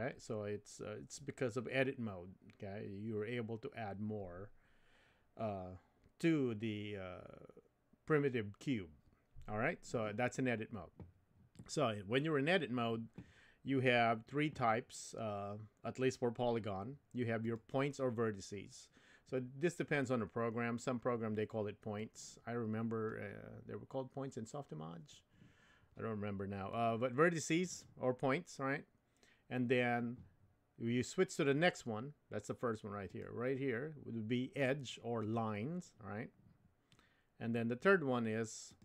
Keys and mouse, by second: 17.4 click, 22.0-23.3 drag, 26.7 click, 33.1 click, 35.2 click, 38.7 click.